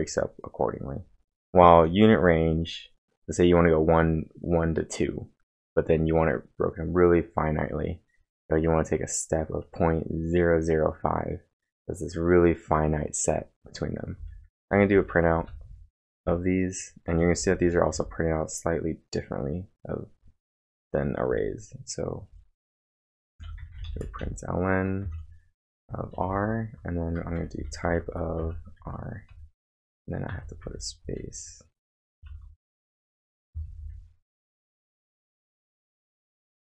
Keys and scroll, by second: 1.1-2.6 typing, 13.9-18.4 typing, 21.3 typing, 25.0-30.3 typing, 32.3 shift+', 32.4 shift+', 33.5 Left, 33.7-36.6 typing, 33.8 Right.